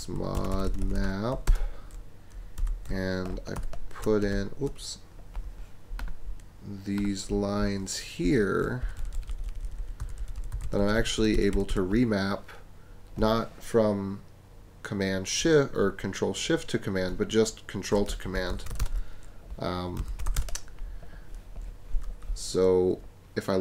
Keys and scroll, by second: 0.0-0.3 typing, 1.5 Return, 2.9 super+a, 3.5 shift+super+v, 4.2 shift+super+BackSpace, 5.1 shift+BackSpace, 8.2 Escape, 8.8-11.1 typing, 18.3-20.7 typing.